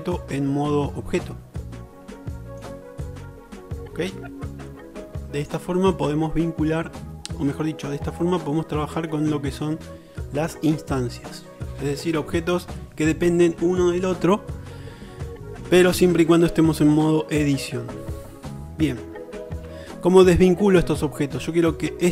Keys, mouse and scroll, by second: 2.3 shift+middle click, 19.7 Tab.